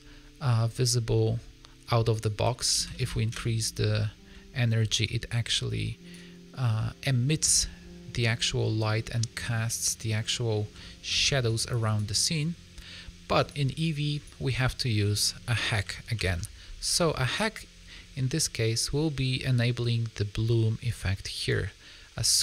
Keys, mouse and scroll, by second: 1.1 middle click, 2.1 click, 3.3 KP_0, 6.0 ctrl+b, 6.8 middle click, 9.2 middle click, 11.0 middle click, 11.0-11.3 scroll down 2, 11.3 ctrl+b, 13.4 click, 14.9 middle click, 16.1 ctrl+alt+b, 16.9 scroll up 2, 17.9 middle click, 20.8 click, 21.4 middle click.